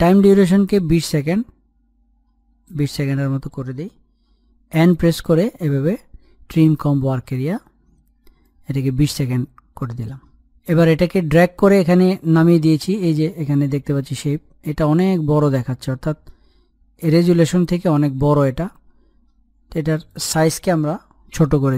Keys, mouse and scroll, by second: 4.7 n, 5.4 right click, 6.5-10.3 drag, 12.7 click, 13.4-14.7 scroll down 1, 14.7-18.5 drag, 18.5-19.9 scroll up 1, 19.9 click, 21.5 s.